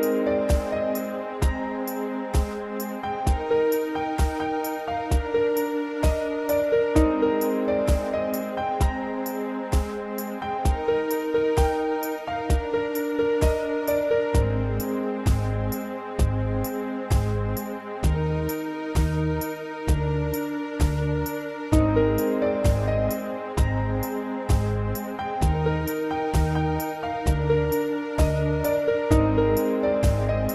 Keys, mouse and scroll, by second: 3.7 Return, 4.6 scroll down 2, 5.2 middle click, 5.8 scroll up 2, 10.4 middle click, 11.7 7, 19.1 shift+middle click, 19.7 scroll up 2, 26.0 scroll down 2, 26.4 shift+middle click.